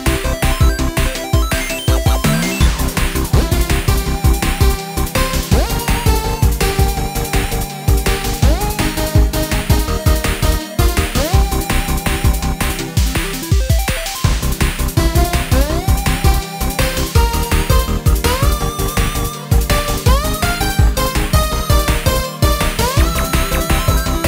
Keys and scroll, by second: 13.7-14.5 typing.